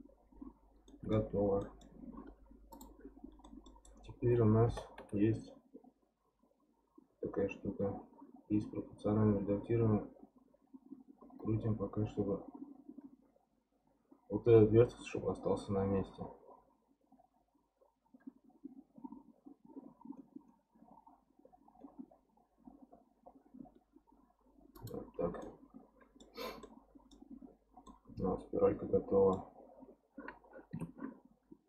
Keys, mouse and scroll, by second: 0.4-0.9 scroll down 1, 0.9-2.7 middle drag, 2.7 click, 3.1 scroll up 1, 3.4-4.6 middle drag, 4.6 g, 25.4 middle click, 26.4 scroll down 3, 26.6 middle click, 27.3-27.9 scroll up 2, 27.9-30.7 middle drag, 30.7 Tab.